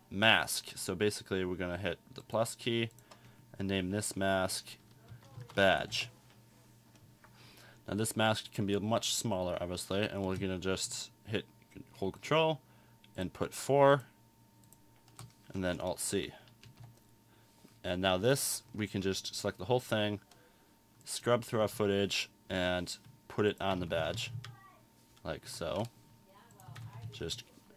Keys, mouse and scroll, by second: 2.2 click.